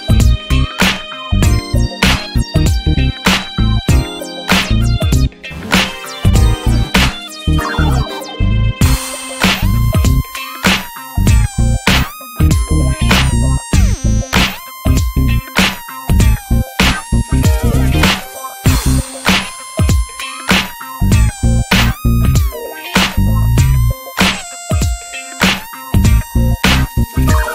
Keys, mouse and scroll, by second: 0.1 ctrl+s, 0.3 click, 0.5 Tab, 0.8 alt+z, 0.9-1.4 scroll up 2, 1.1 shift+middle click, 1.4 ctrl+s, 1.6 shift+click, 2.0-2.3 shift+middle drag, 2.6-3.5 drag, 3.5 ctrl+scroll down 1, 3.6 ctrl+s, 3.8 alt+z, 4.3 ctrl+s, 4.5 click, 4.8 ctrl+s, 5.3 alt+z, 5.6-6.0 scroll up 3, 6.0 drag, 6.2 shift+middle click, 6.5 ctrl+s, 7.4 ctrl+s, 8.0 click, 8.9 scroll down 3, 9.0 alt+z, 9.4 Tab, 9.5 click, 9.6-10.0 scroll down 6, 10.0-10.3 shift+middle drag, 10.3 scroll up 2, 10.5 ctrl+s, 10.7 click, 10.9 Tab, 11.1 scroll up 3, 11.2 alt+z, 11.4 click, 11.7 shift+middle drag, 11.9 scroll up 1, 12.1 ctrl+s, 12.9 click, 14.6-15.1 scroll up 3, 14.8 shift+middle click, 15.2 ctrl+s, 15.8 ctrl+s, 16.1-18.2 scroll up 7, 16.4 shift+middle click, 16.8 ctrl+s, 17.2 shift+middle click, 17.8 ctrl+s, 18.2 shift+middle click, 18.7 scroll up 1, 19.2 scroll down 2, 19.3 shift+middle click, 19.9 scroll up 1, 20.1 ctrl+s, 20.4-21.8 shift+middle drag, 21.8 e, 22.7 click, 23.3 click, 24.2 ctrl+z, 24.9 ctrl+z, 25.4 click, 26.6 shift+middle click, 27.3 e.